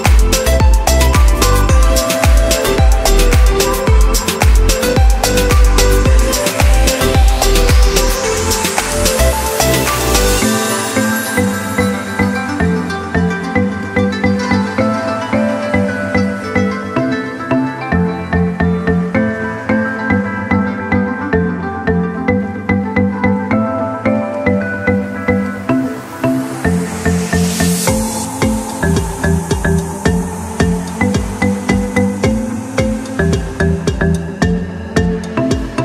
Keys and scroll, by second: 5.9 c, 7.2 o, 8.3 -, 10.0-12.6 typing, 25.8 1, 26.3 Return.